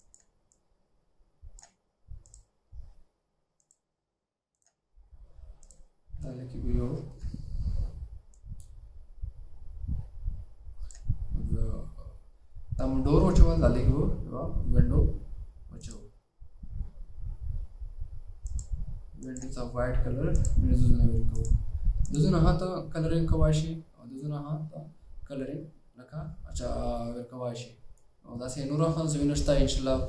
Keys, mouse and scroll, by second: 2.1 double click, 7.2 alt+scroll up 1.